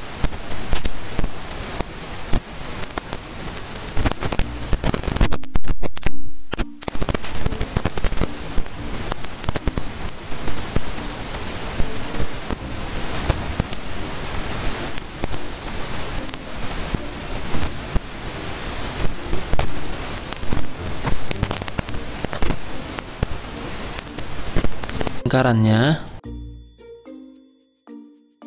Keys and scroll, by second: 5.3 ctrl+z, 5.5 ctrl+z, 5.7 ctrl+z, 6.1 ctrl+z.